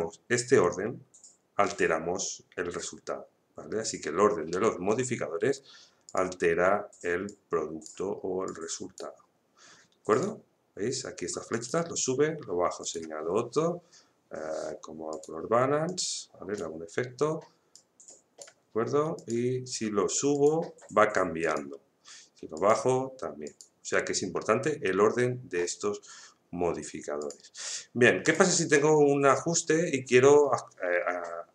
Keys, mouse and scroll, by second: 6.0-19.1 drag, 27.2 click.